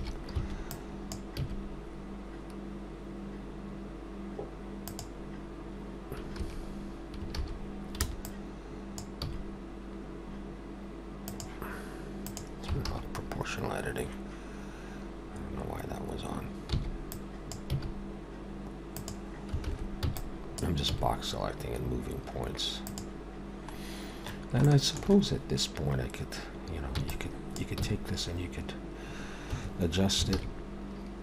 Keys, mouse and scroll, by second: 0.4 alt+b, 1.4 g, 6.4 a, 8.0 b, 9.2 g, 12.1 click, 16.7 b, 17.7 g, 20.0 b, 20.9 g, 23.9 scroll down 1, 24.6 shift+middle click, 26.9 b, 27.8 g, 30.3 alt+a.